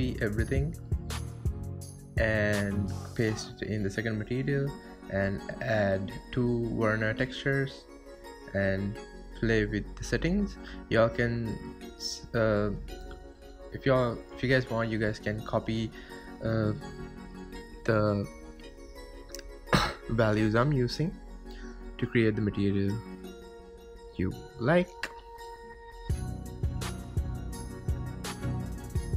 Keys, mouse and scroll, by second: 3.1 middle click, 3.8 ctrl+shift+click, 4.9-6.4 middle drag, 6.4 click, 6.8 shift+d, 10.0-12.7 drag, 15.4-16.5 drag, 17.3-19.0 drag, 20.1 click, 22.4-25.0 drag, 26.9-29.1 drag.